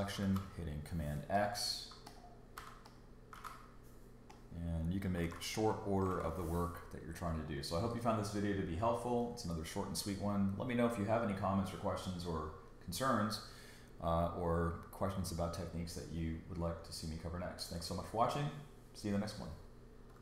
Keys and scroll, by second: 0.2 super+x, 2.6 ↻, 3.3 super+x, 5.2 super+x.